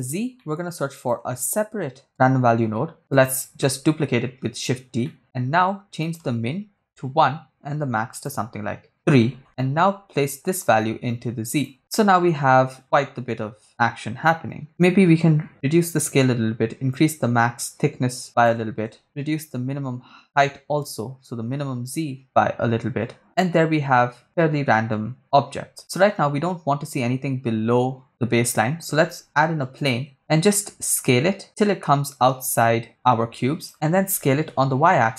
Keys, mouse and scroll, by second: 0.4 middle click, 1.0 click, 2.0 shift+d, 3.1 click, 3.6 middle click, 5.1 middle click, 6.0-7.1 drag, 8.1 click, 10.2-11.7 drag, 14.7-16.0 shift+drag, 17.0-18.6 shift+drag, 19.0-22.2 shift+drag, 28.6 shift+a, 30.4 s, 33.6 click, 34.1 s, 34.5 y.